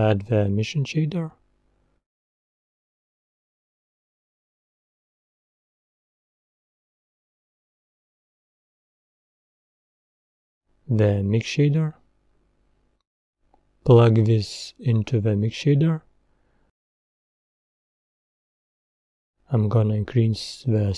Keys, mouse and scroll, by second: 8.7 click, 14.0 scroll up 3, 15.7 click, 20.8 click.